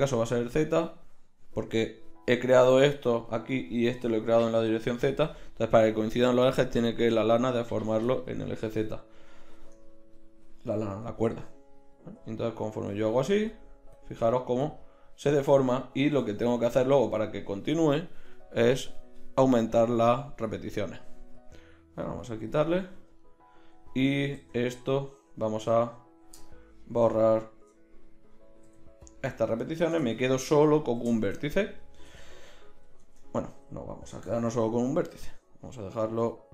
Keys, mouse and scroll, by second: 9.6 Tab, 11.2 g, 16.2 Tab, 24.4 Tab, 28.6 x, 32.0 Tab, 33.0 Tab, 34.2 e.